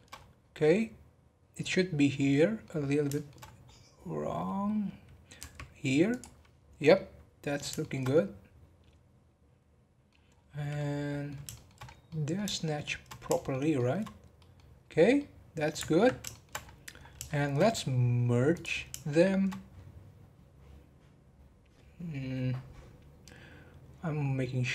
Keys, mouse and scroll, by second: 0.1-2.1 scroll up 5, 2.1 scroll down 2, 2.3 middle click, 2.8 scroll down 1, 3.1 shift+middle click, 3.4-4.2 scroll up 12, 5.4 g, 6.3-6.8 scroll down 7, 6.9-10.3 middle drag, 10.3-10.7 scroll down 2, 10.7-11.8 middle drag, 11.8 scroll up 2, 12.0-13.0 middle drag, 13.0 scroll down 2, 13.3 shift+middle click, 14.0 scroll down 1, 14.3 middle click, 14.7-15.1 scroll down 3, 15.2-16.6 middle drag, 16.6-17.2 scroll up 11, 17.2-18.5 shift+middle drag, 18.5 click, 19.0-22.2 shift+middle drag.